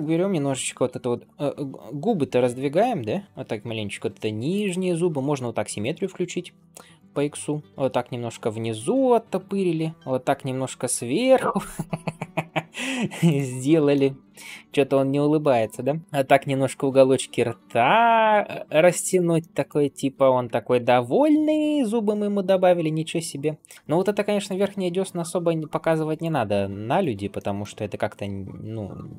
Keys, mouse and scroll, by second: 0.4 g, 5.2 click, 6.8 click, 7.2 g, 8.6 shift+middle click, 9.3 click, 9.9 g, 13.8 shift+middle click, 14.4 click, 14.8 middle click, 16.0 g, 19.2 middle click, 20.1 click, 20.4 shift+middle click, 21.1 g, 26.8 click, 27.2 middle click, 28.1 g.